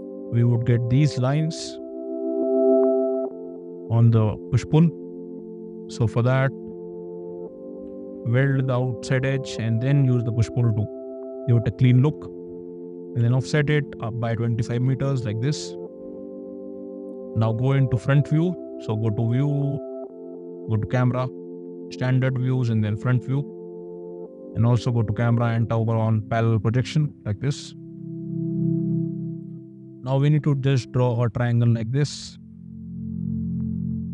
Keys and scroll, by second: 5.6 ctrl+z, 6.0 space, 7.8 w, 9.4 p, 13.1 5, 14.7 Return, 15.4 space, 30.0 l.